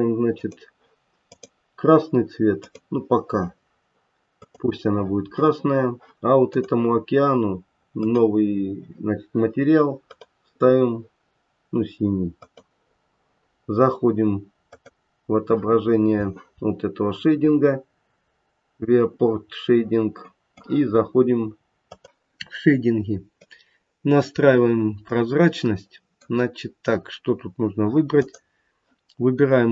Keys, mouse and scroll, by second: 0.3 click, 1.3 click, 2.6 click, 6.5 click, 8.0 click, 10.1 click, 14.9 click, 20.3 middle click.